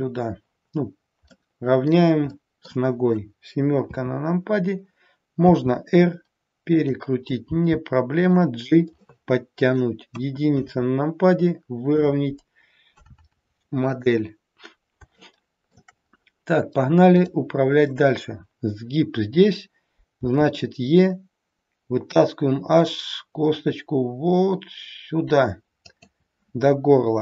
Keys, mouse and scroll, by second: 1.3 middle click, 2.3 middle click, 3.8 KP_7, 5.5 r, 7.4 g, 9.0 middle click, 10.2 KP_1, 10.8-11.4 scroll up 1, 11.5-11.9 scroll down 1, 15.3 shift+middle click, 16.0-16.4 scroll up 2, 17.3 click, 17.3-18.2 scroll up 2, 20.2 e.